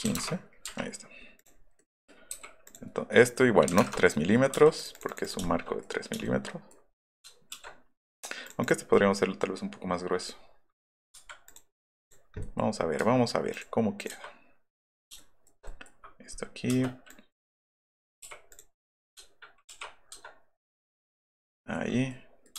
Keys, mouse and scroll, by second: 0.1 KP_1, 0.3 KP_Enter, 0.7 Up, 1.8 middle click, 2.4 p, 2.7 click, 3.7 KP_3, 3.8 Return, 4.3 click, 4.5 click, 4.5 space, 5.5 shift+middle click, 9.0 middle click, 9.4 middle click, 10.9 middle click, 11.2 Escape, 11.8 scroll up 1, 12.4 scroll up 1, 13.0 q, 13.6 click, 14.0 click, 15.1 shift+middle click, 17.1 click, 17.4 click, 18.2 p, 18.5 click, 18.8 scroll up 1, 19.7 ctrl+k, 21.2 click, 21.5 scroll up 2, 21.9 middle click, 22.1-22.5 scroll up 2.